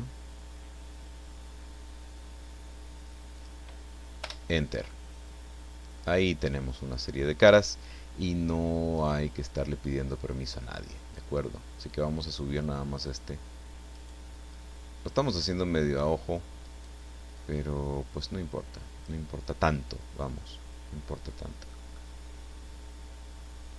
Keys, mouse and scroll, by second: 3.4 click, 4.2 Return, 4.9-7.7 middle drag, 9.0 right click, 11.1-13.3 drag, 13.9 right click, 14.5-16.2 drag, 16.6 right click, 17.4-19.3 drag, 20.2-20.7 scroll down 1, 21.1 middle click, 21.9-23.7 middle drag.